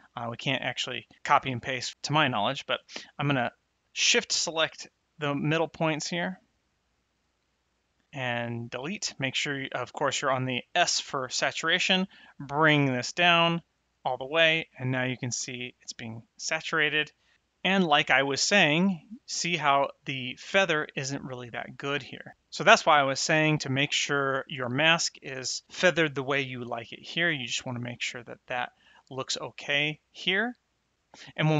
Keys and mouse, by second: 0.6 click, 3.9 shift+click, 4.7 shift+click, 5.4 shift+click, 6.0 shift+click, 6.6 shift+click, 7.2 shift+click, 7.6 shift+click, 8.0 click, 12.0 click, 13.7 click, 23.4 click, 24.6 middle click, 27.6 ctrl+shift+click, 28.5 middle click.